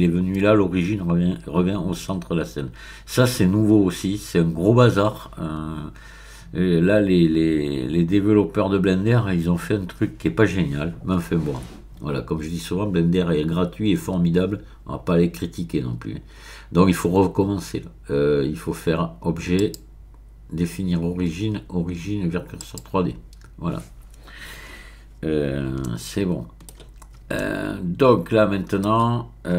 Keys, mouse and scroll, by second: 19.5 click, 22.6 click, 25.4-25.8 scroll down 2, 25.8-29.2 shift+middle drag.